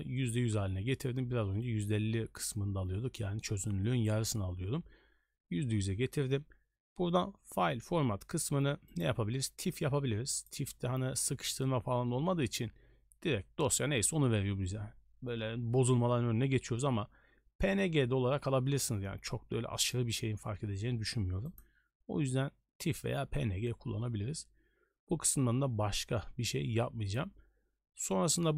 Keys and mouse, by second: 9.0-10.5 drag, 21.6-22.4 drag.